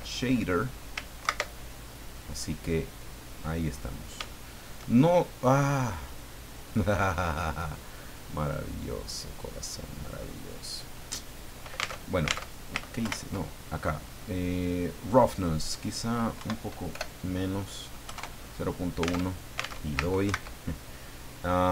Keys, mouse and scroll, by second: 1.2 ctrl+Right, 2.7-4.2 middle drag, 4.3 shift+middle click, 8.9 scroll down 2, 9.6-10.0 scroll up 2, 10.2-10.5 scroll down 2, 11.9 alt+Tab, 13.0 ctrl+Left, 15.3 click, 16.4 Right, 16.9 BackSpace, 18.0 KP_1, 18.6 KP_Enter, 19.2 alt+Tab, 20.4 ctrl+Right.